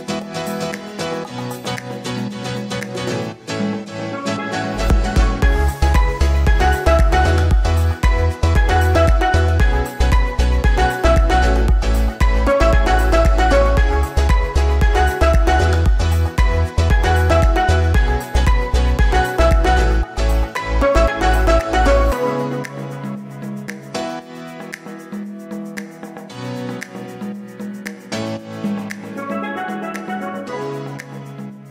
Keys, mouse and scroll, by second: 0.7 click, 1.9-2.9 drag, 2.9 g, 9.2 click, 9.8-10.8 drag, 12.2-13.6 right drag, 14.2 right click, 15.1 BackSpace, 15.2 BackSpace, 16.0 Left, 16.3 Left, 17.4 Right, 17.4 Right, 22.7 drag, 23.3 click, 23.9-25.0 drag, 25.1 scroll down 1, 25.3 g, 28.9 click, 30.6-31.7 right drag.